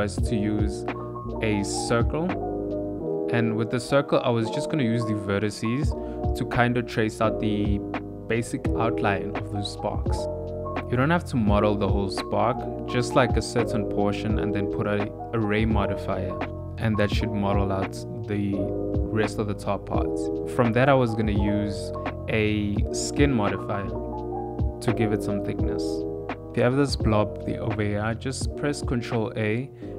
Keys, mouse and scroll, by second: 0.1 KP_7, 0.3 shift+a, 1.2 click, 1.5 click, 2.4 click, 2.7 click, 2.9 Tab, 3.4 click, 3.6 middle click, 3.7-5.2 typing, 4.5 click, 4.6 middle click, 5.5 click, 5.6 middle click, 5.8 shift+middle click, 5.9 ctrl+middle click, 6.1 middle click, 6.3-9.6 typing, 6.6 middle click, 6.9 scroll down 1, 7.1 middle click, 7.7 click, 8.2 click, 8.6 click, 9.0 click, 9.5 click, 10.0 Tab, 10.1 middle click, 10.5 click, 10.7 click, 11.2 middle click, 11.6 ctrl+a, 11.8 click, 12.1 ctrl+a, 12.2 middle click, 12.4 click, 12.6 click, 13.0 middle click, 13.7 right click, 14.2 click, 14.4 middle click, 14.9 click, 15.1 middle click, 15.5 g, 16.0 s, 16.3 middle click, 16.5 s, 16.8 shift+middle click, 17.0 middle click, 17.3 shift+middle click, 17.4 s, 18.6 g, 19.2 middle click, 20.0 click, 22.7 Tab, 23.2 ctrl+a, 26.0 a, 26.5 ctrl+a, 27.9 ctrl+a.